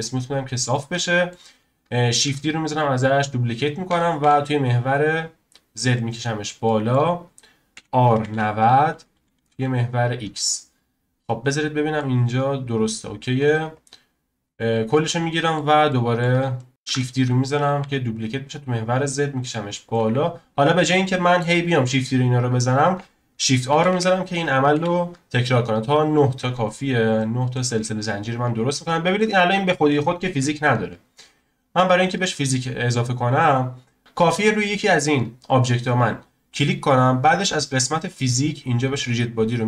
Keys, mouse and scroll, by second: 0.5 scroll down 2, 0.7-2.2 middle drag, 2.2 shift+d, 6.3-6.6 scroll down 1, 6.6-7.7 shift+middle drag, 7.7 r, 11.1-11.4 scroll up 1, 11.4-12.8 middle drag, 12.8-13.4 scroll down 1, 13.7 drag, 14.6 scroll down 1, 14.9-16.7 middle drag, 16.7 scroll down 1, 16.8 shift+d, 20.2-21.1 scroll down 5, 21.1-23.7 shift+middle drag, 23.7 shift+r, 23.9 shift+r, 24.7 shift+r, 26.8 scroll down 1, 27.2-27.7 shift+middle drag, 27.7-28.2 scroll up 1, 28.2 click, 28.6 scroll down 1, 28.8-31.3 shift+middle drag, 31.3-31.7 scroll up 1, 32.9-33.3 scroll up 2, 34.0-34.7 scroll up 3, 34.7-35.4 shift+middle drag, 35.4 click, 38.1 click, 39.0-39.6 drag.